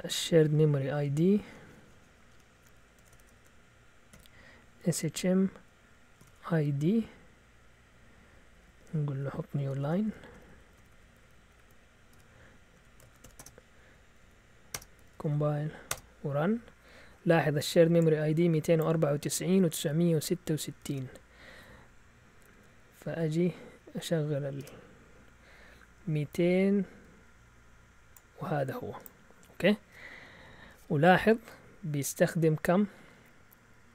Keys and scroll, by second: 2.7-6.6 typing, 8.2-15.9 typing, 13.8 Up, 14.0 Up, 14.2 Up, 15.9 Return, 20.9 alt+Tab, 22.3 Up, 22.8 Up, 23.6 Down, 24.5 Return.